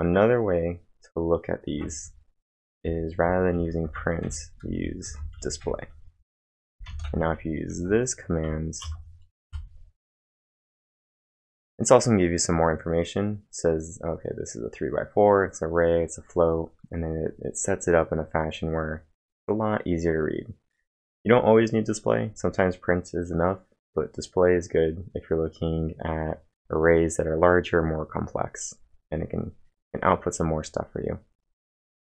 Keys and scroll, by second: 1.7 ctrl+1, 3.0-7.3 typing, 7.7 ctrl+`, 8.9 Up, 9.5 Return.